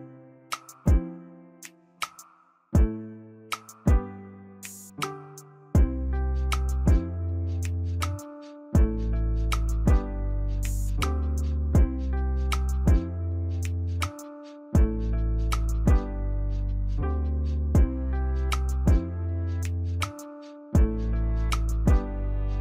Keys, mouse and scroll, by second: 4.5 double click, 7.5 s, 8.8 ctrl+s, 14.1-17.6 scroll up 3, 19.6 right click.